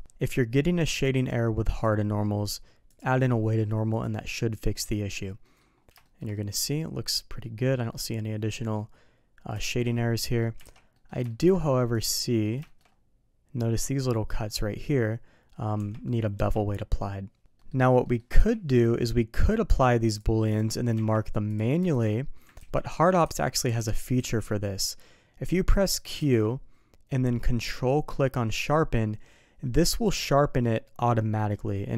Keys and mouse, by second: 0.9 click, 1.7 click, 2.9 click, 3.9 click, 5.4 middle drag, 6.0 shift+middle click, 6.3-7.5 middle drag, 7.9-8.8 middle drag, 9.6 shift+middle drag, 10.2 middle click, 10.7 alt+a, 10.9 middle click, 11.3 middle drag, 12.2 middle click, 12.6 middle click, 15.8 Tab, 16.3 Tab, 17.6 middle click, 18.0 middle click, 18.4 n, 19.3-19.8 drag, 20.1-20.6 drag, 21.9 shift+click.